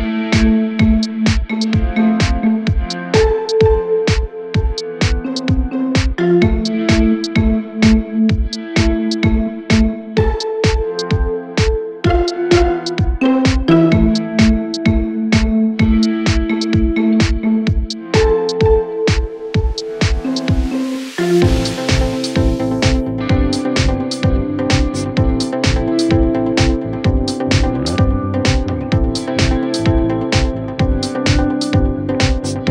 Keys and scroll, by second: 6.5 ctrl+d, 6.6 Escape, 14.6 ctrl+d, 14.7 Escape, 25.3 p, 29.5 F1, 30.1 ctrl+d, 30.1 Escape, 30.6 ..